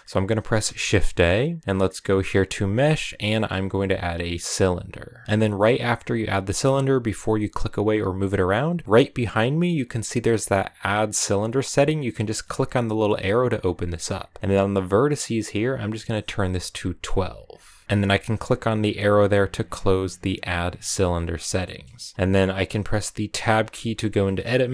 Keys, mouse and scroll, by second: 0.5 shift+a, 11.2-17.1 drag, 20.8 click, 21.2-21.6 scroll down 2, 21.6 middle click, 22.0-22.4 scroll up 1, 23.4 Tab.